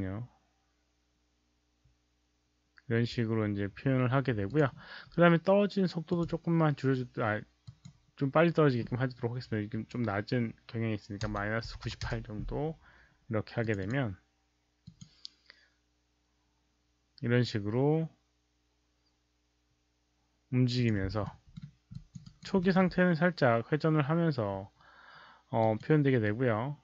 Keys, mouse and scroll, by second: 2.5 click, 2.9 Return, 2.9 click, 2.9 KP_0, 2.9 KP_1, 4.6 click, 6.0 click, 7.6 click, 10.5 click, 11.1 KP_Subtract, 11.1 click, 11.6 KP_9, 11.8 KP_8, 12.0 Return, 12.0 KP_Subtract, 12.0 click, 12.0 KP_8, 12.0 KP_9, 13.6 Return, 13.6 KP_Subtract, 13.6 click, 13.6 KP_8, 13.6 KP_9, 14.8 click, 18.4 Return, 18.4 KP_Subtract, 18.4 click, 18.4 KP_8, 18.4 KP_9, 19.4 Return, 19.4 KP_Subtract, 19.4 click, 19.4 KP_8, 19.4 KP_9, 20.9 click, 21.2 alt+middle click, 21.9 alt+click, 22.2 alt+right click, 22.5 alt+middle click, 25.5 click, 25.7 alt+middle click, 25.7 alt+right click.